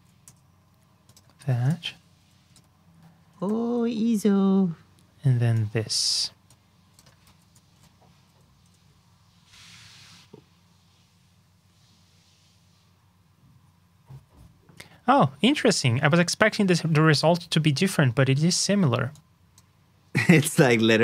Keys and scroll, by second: 1.3 super+c, 1.6 super+j, 7.2 super+c, 7.6 super+j.